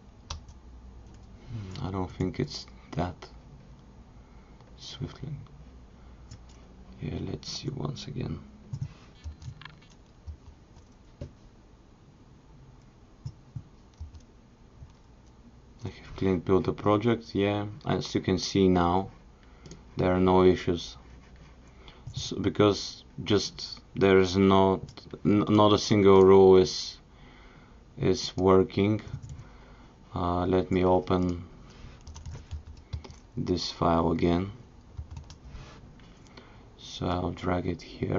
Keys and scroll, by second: 10.3 super+b.